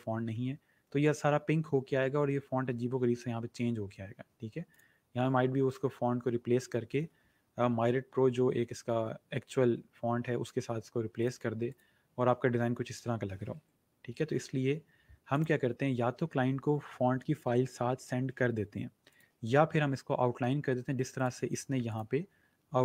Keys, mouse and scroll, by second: 4.6 click, 7.3-8.1 typing, 11.1 click, 14.2 ctrl+z, 15.2 click, 19.0 click, 21.0 click, 22.0 click.